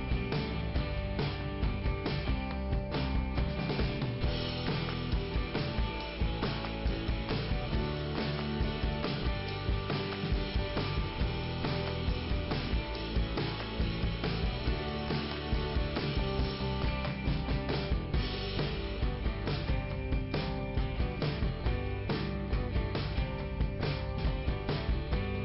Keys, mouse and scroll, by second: 7.4 click, 8.3 click, 10.5 click, 10.7 click, 11.6 click, 12.5 click, 14.3 click, 16.3 click, 23.6 middle click, 24.3 scroll up 1.